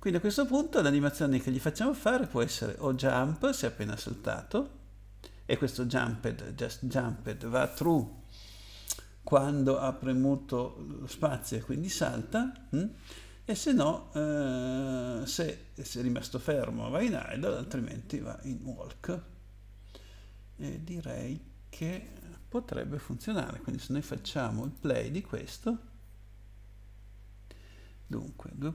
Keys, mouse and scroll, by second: 1.1 click, 2.8 click, 3.0 click, 3.2 double click, 21.8 click, 24.6 click.